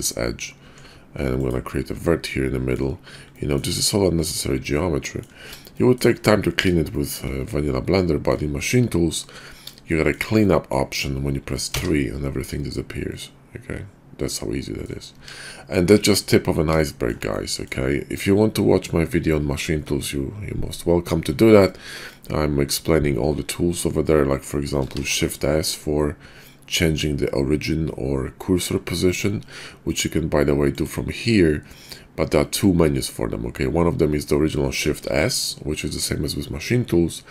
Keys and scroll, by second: 0.6 Tab, 11.6 3, 15.2 Tab, 25.3 shift+s, 35.0 shift+s.